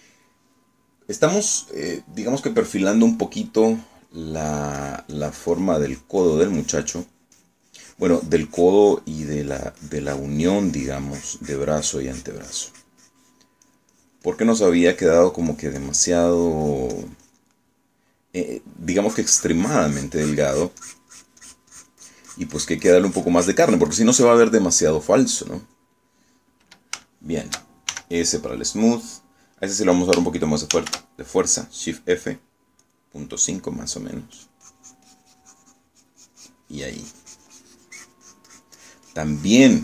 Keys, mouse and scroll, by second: 3.3 scroll up 2, 3.5 middle click, 4.7 click, 5.9-7.0 drag, 8.5-14.4 drag, 14.7 click, 18.7 middle click, 20.2-25.6 drag, 25.6 middle click, 26.7 middle click, 28.1 shift+middle click, 29.0 shift+s, 29.2 shift+middle click, 30.1 middle click, 31.9 shift+f, 33.9 click, 35.5-39.8 drag.